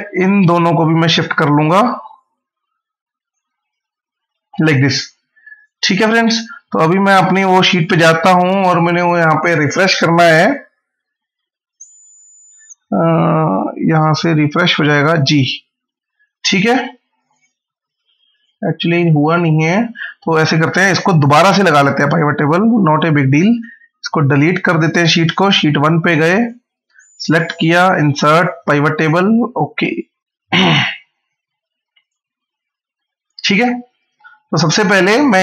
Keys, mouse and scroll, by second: 0.6 right click, 1.9 click, 7.6 click, 13.7 right click, 14.9 click, 20.9 right click, 23.1 click, 31.0-31.6 scroll down 1, 31.8 click, 32.1 scroll down 1, 32.7 scroll up 1.